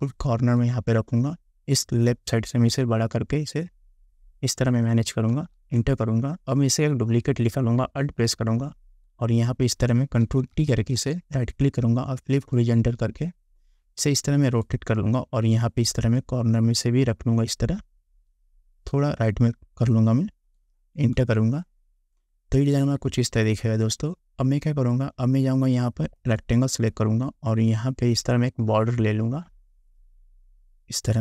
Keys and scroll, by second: 5.5 Return, 10.4 ctrl+t, 21.3 Return.